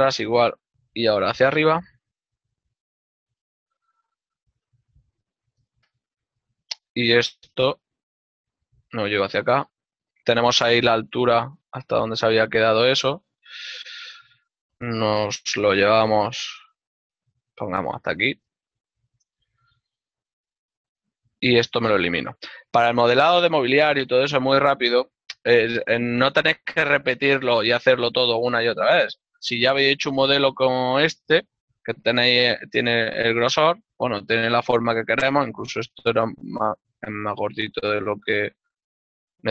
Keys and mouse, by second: 1.8 z, 2.0 click, 2.4 ctrl+Tab, 3.1 click, 3.3 right click, 7.5 shift+middle click, 9.7 click, 10.2 middle click, 12.9 click, 13.5 alt+right click, 13.9 ctrl+middle click, 16.3 z, 20.3 click, 21.3 l, 22.5 click, 27.1 l, 30.3 middle click, 38.1 z.